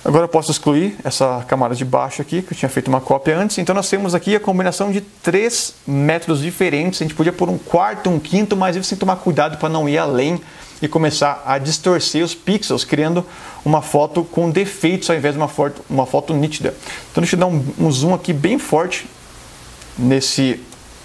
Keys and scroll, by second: 18.6 space.